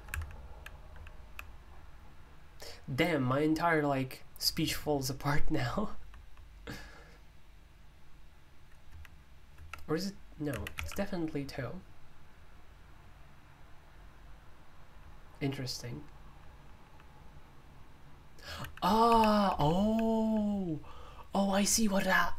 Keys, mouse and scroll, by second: 0.0 Escape, 0.1-1.2 typing, 5.9 l, 10.4-11.2 typing, 14.9 typing, 16.2-17.0 typing, 19.0 h, 19.3 h, 19.4 h, 19.6 h.